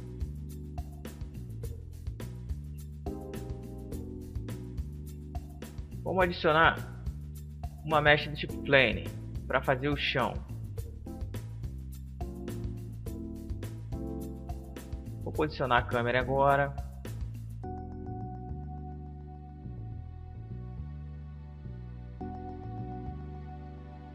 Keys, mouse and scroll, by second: 4.3-6.3 drag, 9.7 s, 12.1-13.4 middle drag, 13.4 right click, 14.1-15.4 middle drag, 14.9 KP_8, 15.9 KP_5, 16.5 KP_7, 17.3 KP_5, 18.5 middle click, 21.4 ctrl+alt+KP_0, 23.2-23.9 scroll up 1, 23.9 scroll up 1.